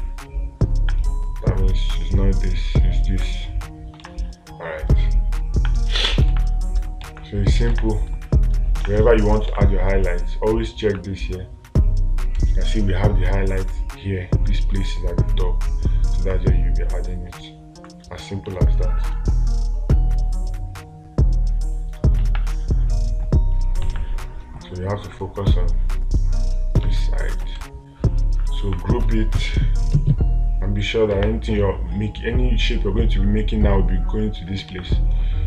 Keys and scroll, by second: 4.5 space, 6.7 space, 8.2 space, 9.3 space, 19.0 space, 22.7 space, 24.4 space, 27.2 space, 31.6 space, 35.1 space.